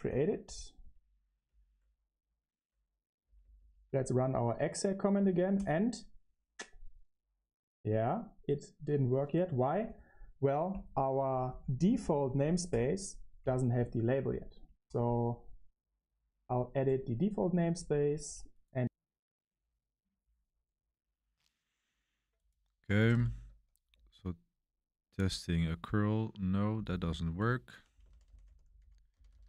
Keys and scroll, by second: 0.0 BackSpace, 0.7 Return, 0.7 q, 3.2 Up, 3.3 Up, 3.5 Up, 3.8 Up, 4.3 Up, 23.8 Return, 27.7-29.4 typing.